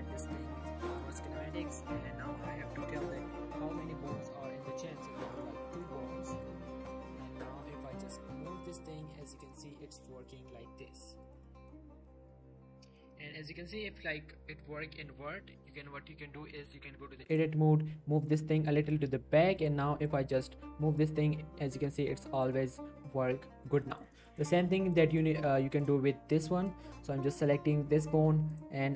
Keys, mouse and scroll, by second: 1.1 click, 5.3 click, 6.0 click, 6.1 scroll down 1, 6.3 middle click, 6.9 g, 11.2 right click, 11.4 middle click, 11.9 g, 12.8 right click, 13.1 middle click, 13.6 g, 15.1 right click, 15.4 scroll up 1, 15.7 Tab, 17.0-17.3 scroll up 1, 17.3 click, 17.5 g, 18.3 click, 18.8 Tab, 19.6 middle click, 20.0 click, 20.2 scroll down 1, 20.4 g, 22.3 right click, 22.9 g, 23.6 right click, 23.9 shift+middle click, 24.6 shift+scroll up 3, 24.7 middle click, 25.8 click.